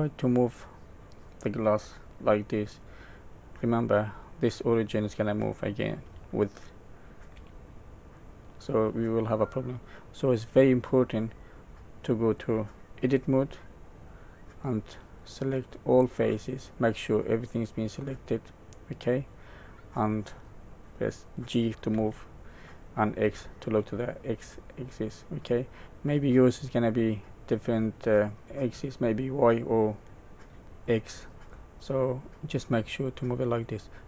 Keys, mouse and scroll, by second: 0.2 click, 0.9 Tab, 6.0 g, 11.3 middle click, 13.0 Tab, 15.1 click, 16.6 middle click, 21.3 x, 21.9 g, 31.5 middle click, 33.8-34.0 scroll up 3.